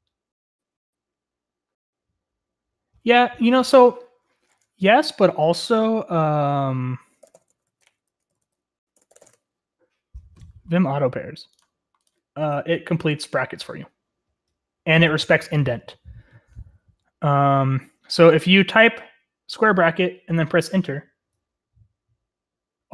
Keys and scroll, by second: 4.5 ctrl+t, 7.0-9.9 typing.